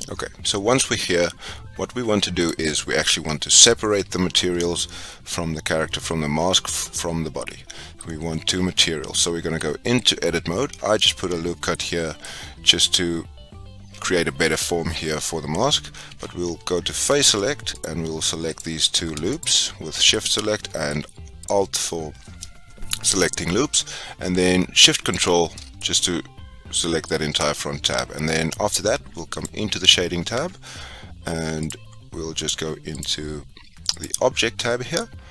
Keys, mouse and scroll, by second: 0.0-2.4 middle drag, 2.4 click, 7.3-9.0 middle drag, 9.0 Tab, 9.6 middle click, 9.9 scroll up 4, 11.7-16.0 middle drag, 16.0 3, 17.8 alt+click, 18.5 alt+click, 19.4 alt+shift+click, 20.0-21.4 middle drag, 21.4 shift+click, 25.0 ctrl+shift+click, 25.6 scroll down 1, 25.7-29.3 middle drag, 29.3 click.